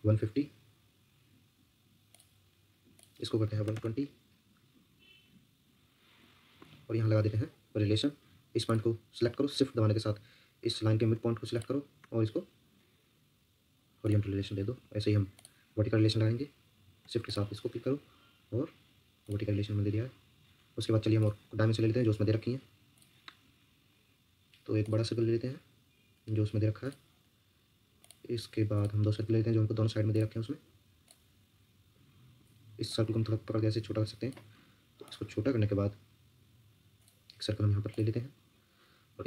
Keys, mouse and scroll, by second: 0.0-0.2 typing, 3.2-4.1 typing, 6.6 Escape, 6.9 Escape, 7.1 scroll down 1, 7.4-7.7 scroll up 1, 11.5 shift+click, 14.7 Escape, 17.2 shift+click, 32.3 Escape, 39.1 Escape.